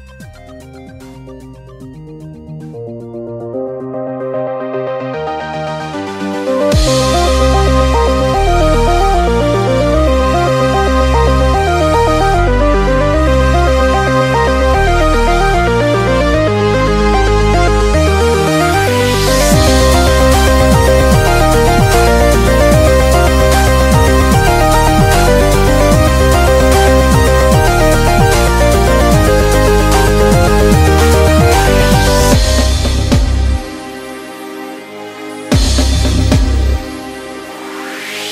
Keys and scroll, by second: 1.7 super+z, 3.5 super+z, 4.2-4.9 typing, 6.2 super+z, 7.9 super+z, 12.5 super+], 18.5-20.8 typing, 25.1 typing, 30.3 ], 32.9 b.